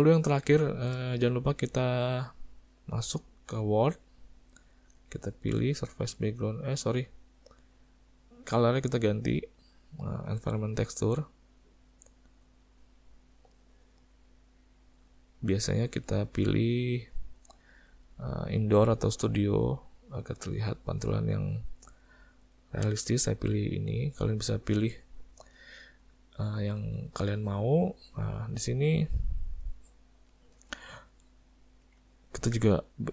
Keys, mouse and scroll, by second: 0.2 middle click, 0.6 shift+middle click, 1.2 middle click, 3.0 click, 5.8 click, 8.6 click, 12.7 click, 29.2 middle click, 29.8 shift+middle click, 32.1 ctrl+middle click, 32.8 click.